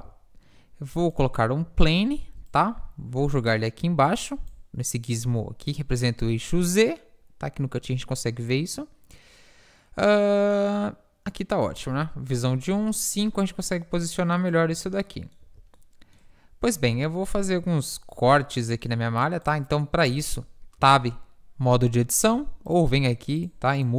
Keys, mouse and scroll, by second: 1.7 s, 2.4-7.2 drag, 8.6-10.3 drag, 11.8 KP_1, 12.8 KP_1, 12.9 KP_5, 14.7 z, 15.9 z, 18.2 Tab, 18.2 ctrl+r, 20.2 Tab, 20.9 Tab, 22.7 Tab.